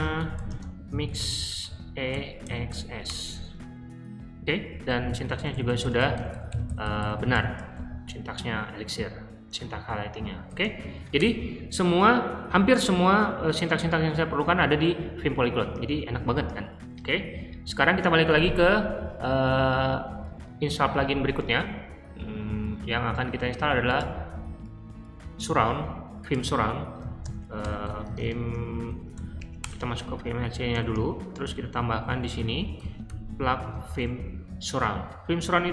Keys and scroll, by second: 0.0-3.0 typing, 4.8-7.3 typing, 10.3-11.2 typing, 25.4 super+c, 27.0-29.6 typing, 30.8-33.5 typing, 33.6 super+v.